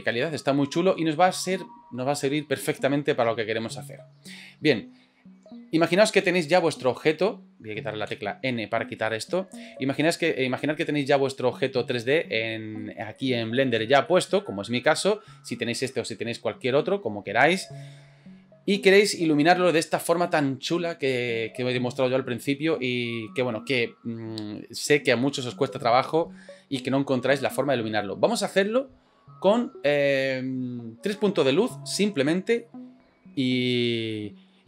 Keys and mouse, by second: 8.0 n, 9.2-9.8 middle drag, 9.9 middle drag, 10.5 middle click, 12.3 middle click, 13.2 shift+middle drag, 13.6 middle click, 14.1 middle click, 14.5-15.6 middle drag, 34.2-34.6 middle drag.